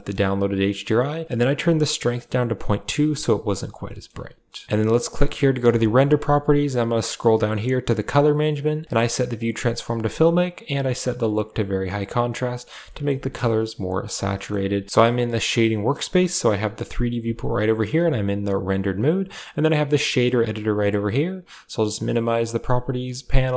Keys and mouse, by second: 2.0 click, 3.8 middle click, 4.4 KP_0, 10.6 click, 12.8 shift+middle click, 13.5 middle click, 14.2 shift+middle click, 15.4 click, 17.0 z, 19.3 click, 21.3-23.0 drag.